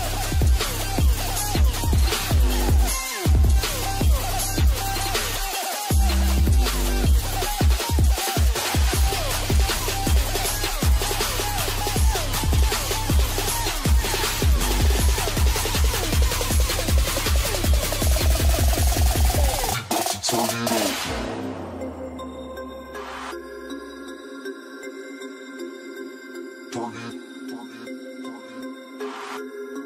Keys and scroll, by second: 1.3 ctrl+space, 2.7 ctrl+space.